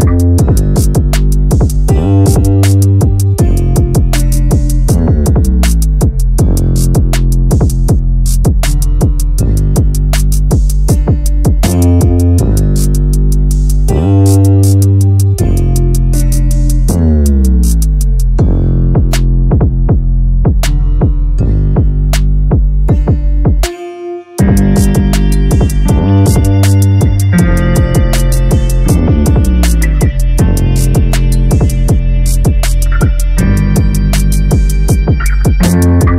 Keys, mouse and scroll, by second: 0.1-0.6 scroll down 2, 0.6-1.8 shift+middle drag, 1.8-2.5 scroll up 4, 2.5 click, 2.9 Tab, 4.1 l, 4.7 g, 6.1 g, 7.4 s, 8.2 middle click, 8.7-9.2 scroll up 6, 9.2 shift+middle click, 9.8-10.2 scroll up 3, 10.2 g, 11.0-12.2 middle drag, 12.2 g, 13.7 scroll down 1, 13.9-15.8 typing, 15.1 scroll down 2, 15.3 Tab, 15.9-16.6 scroll down 1, 16.6-19.2 shift+middle drag, 19.2-19.6 scroll up 2, 19.6 click, 20.1 Tab, 20.6 2, 20.9 click, 21.3 g, 22.9 click, 23.5 click, 24.0 g, 25.5 click, 25.9 click, 26.4 g, 28.0 click, 28.5-30.2 typing, 29.4 scroll down 1, 29.7 Tab, 30.8-31.1 shift+middle drag, 31.1-31.6 scroll down 1, 31.6-32.6 shift+middle drag, 32.6 shift+a, 35.2-36.1 drag.